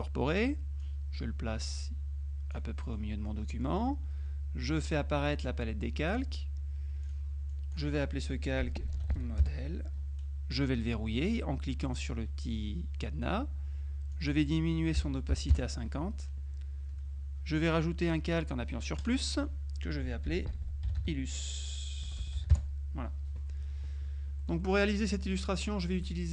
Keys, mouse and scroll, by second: 0.9-3.5 drag, 3.8 click, 4.9 click, 6.2 click, 7.1 click, 8.4-9.5 typing, 12.0 click, 14.2 click, 15.1 KP_5, 15.5 Delete, 15.6 Return, 19.1 click, 20.1-22.5 typing, 22.6 Return, 24.5 middle click, 25.4 click.